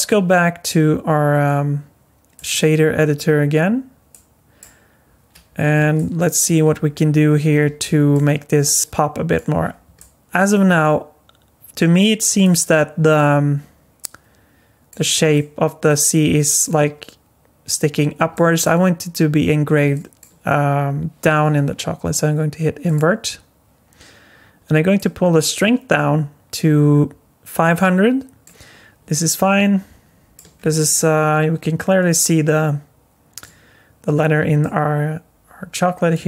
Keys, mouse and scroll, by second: 2.3 click, 5.5 scroll up 2, 6.0 shift+middle click, 6.8-7.6 scroll up 7, 7.8 shift+middle click, 8.8 middle click, 8.8 scroll down 4, 9.7 scroll up 2, 10.0 middle click, 13.1 middle click, 15.3 middle click, 18.3 alt+middle click, 19.9 middle click, 22.9 click, 25.0 click, 28.5 click, 29.1 middle click, 30.5 scroll down 5, 30.9 middle click, 34.6 middle click.